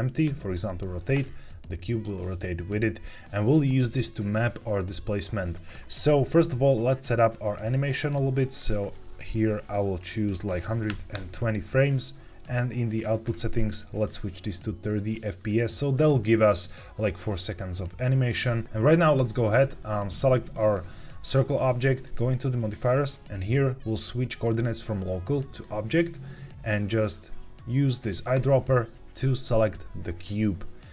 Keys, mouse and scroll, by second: 0.2 r, 1.1 Escape, 7.6 click, 8.5-11.5 drag, 12.8 click, 13.9-15.4 drag, 19.5 click, 21.9 click, 24.4-25.6 drag, 28.2 click.